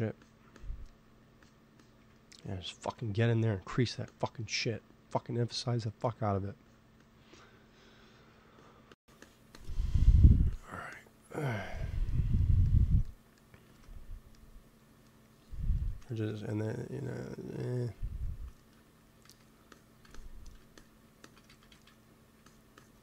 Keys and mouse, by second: 1.1-3.8 drag, 3.8 middle click, 4.0-5.8 drag, 6.5-12.7 drag, 8.1 f, 13.6 ctrl+s, 17.0 t, 17.6-19.3 drag, 18.7 t, 19.2 f, 19.7-22.2 drag, 21.4 ctrl+z, 21.6 ctrl+z.